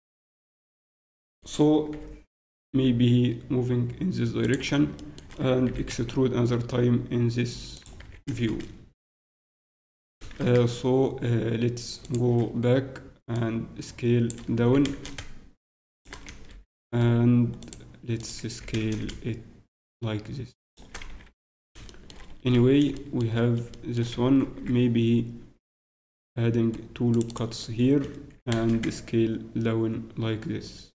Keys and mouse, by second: 2.9 g, 5.7 e, 8.0 s, 12.0 s, 15.9 s, 18.5 ctrl+s, 21.0 z, 21.3 Tab, 22.8 z, 30.5 s.